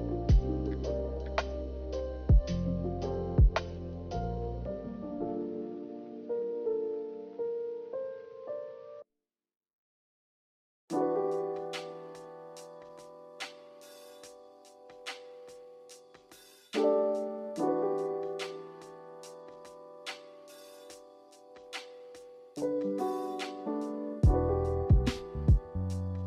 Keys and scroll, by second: 4.6 b, 10.1 Delete, 17.4 b.